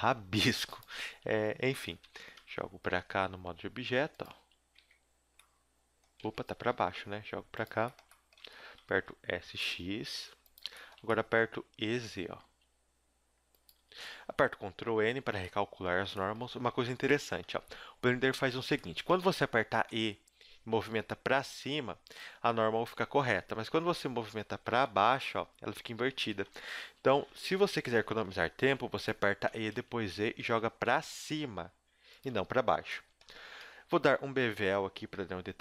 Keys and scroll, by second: 1.1 g, 2.4 Tab, 2.8 g, 4.3 z, 4.8 Tab, 6.2 Tab, 6.5 g, 8.4 Tab, 8.8 s, 11.8 e, 13.7 a, 14.0 a, 14.8 ctrl+n, 16.8 ctrl+z, 16.9 ctrl+z, 17.5 ctrl+z, 17.7 ctrl+z, 19.9 e, 23.7 ctrl+z, 24.6 e, 26.7 ctrl+z, 26.9 ctrl+z, 28.0 s, 29.4 e, 32.3 a, 33.6 a.